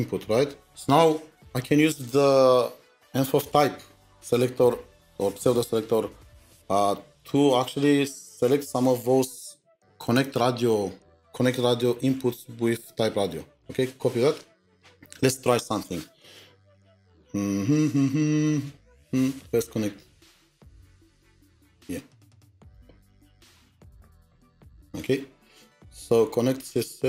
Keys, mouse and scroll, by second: 10.2-10.6 scroll up 10, 10.6 double click, 14.7 typing, 23.3 typing, 23.3-24.0 scroll up 5, 25.0 middle click.